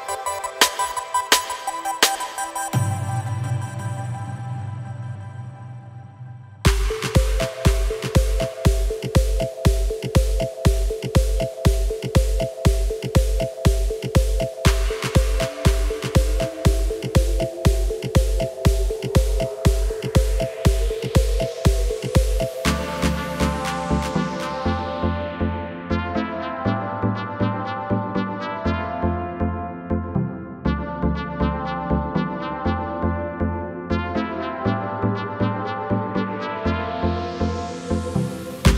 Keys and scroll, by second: 4.8 Tab, 17.1 shift+e, 19.3 Tab.